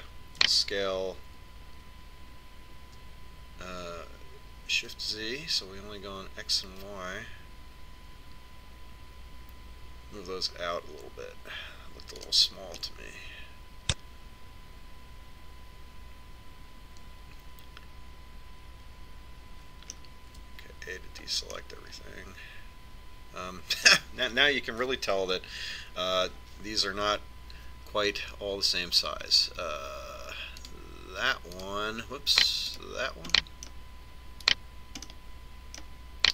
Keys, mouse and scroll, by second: 1.9 s, 14.3-16.2 middle drag, 21.9 a, 23.2-25.0 middle drag, 26.9 ctrl+KP_7, 32.3-36.1 right drag, 35.1-36.1 drag, 36.1-36.3 middle drag, 36.2 right click.